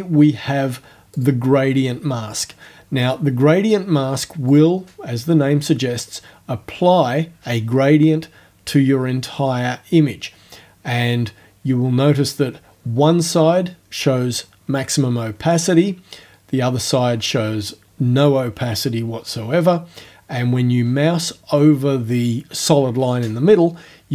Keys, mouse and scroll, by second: 1.2 click, 4.5 click.